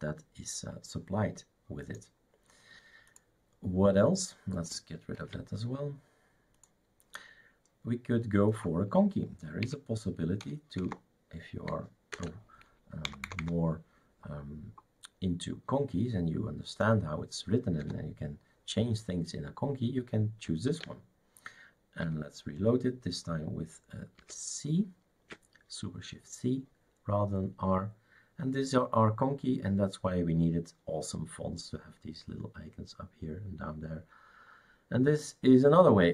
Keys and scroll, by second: 5.2 shift+super+q, 9.9 Up, 10.9 Down, 12.1 typing, 13.0 Down, 13.4 Down, 17.8 BackSpace, 20.7 ctrl+s, 24.2 shift+super+c.